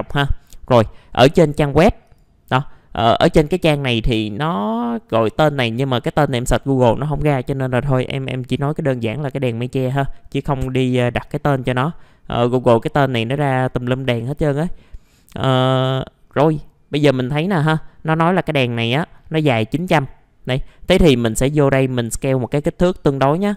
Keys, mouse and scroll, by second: 2.0-3.1 drag, 3.5-4.3 scroll up 1, 4.3 click, 15.0-18.0 scroll down 1, 18.3 click, 21.8 middle click, 22.4 ctrl+right click, 23.4-23.5 drag.